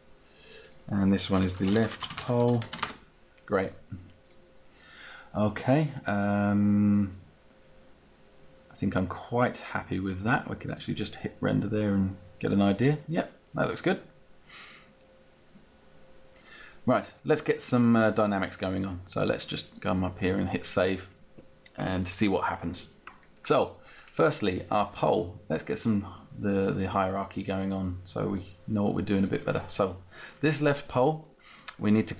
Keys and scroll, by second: 1.2-2.8 typing, 3.6 Return.